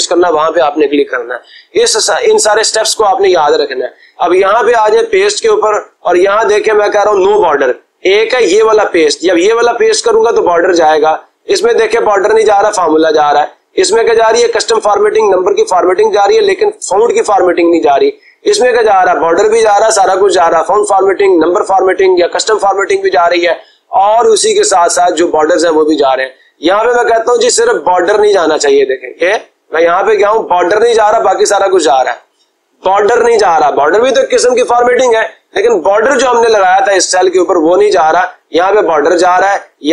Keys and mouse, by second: 4.8-5.9 drag.